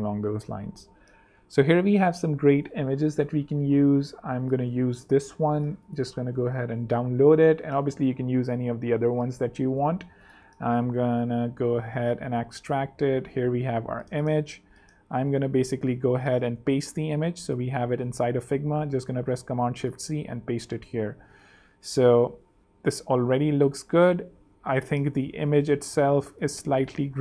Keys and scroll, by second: 11.9 Right, 13.1 super+Right, 13.1 super+c, 13.3 super+Tab, 15.5 z, 16.4 super+z, 16.4 super+v, 16.8 super+space, 17.5 space, 18.7 alt+super+c, 19.3 alt+super+z, 19.8 super+z, 20.0 super+v, 21.8 z, 22.3 super+3, 24.7 super+2, 25.3 super+z, 25.6 space, 26.6 z, 27.1 space.